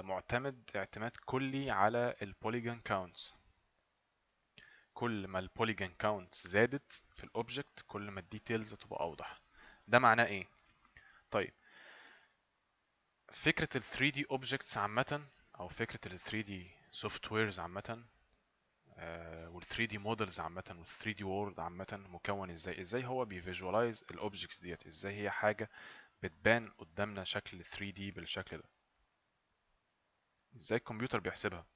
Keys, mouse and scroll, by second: 28.2 right click, 31.6 right click.